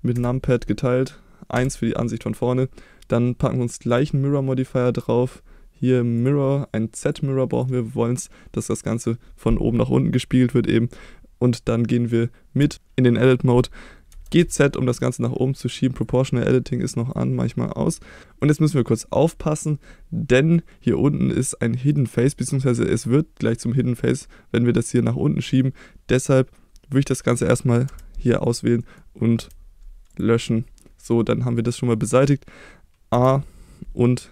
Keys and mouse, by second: 0.2 KP_Divide, 1.6 KP_1, 7.1 click, 7.6 click, 12.7 Tab, 12.7 Tab, 14.1 g, 14.4 z, 16.0 click, 17.0 click, 18.7-20.6 middle drag, 21.5 middle click, 23.8 middle click, 27.9 3, 28.8 middle click, 29.4 x, 30.8 middle click, 33.2 a.